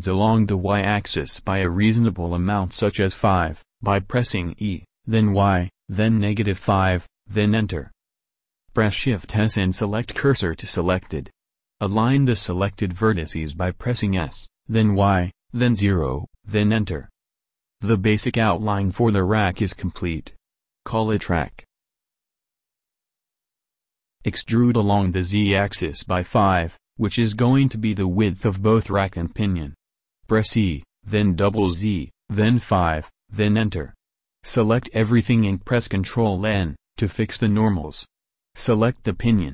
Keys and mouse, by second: 8.4 shift+s, 11.0 click, 13.1 s, 15.1 click, 18.5-20.5 right drag, 20.8-25.3 middle drag, 25.3 a, 25.6 a, 28.8 e, 34.2 a, 34.6 a, 35.4 ctrl+n, 38.2 Tab, 38.9 click, 39.2 Tab.